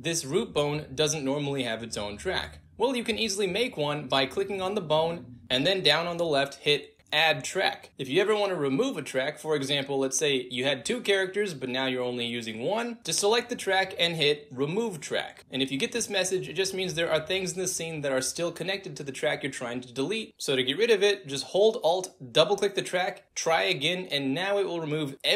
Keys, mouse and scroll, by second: 0.0 click, 0.4 w, 1.2-2.8 drag, 3.1 ctrl+z, 4.7 click, 5.5-6.8 drag, 7.4-9.1 drag, 9.2 click, 11.2 click, 12.4 click, 13.5 click, 15.0 click, 17.8 click, 21.0 alt+click, 21.2 alt+click.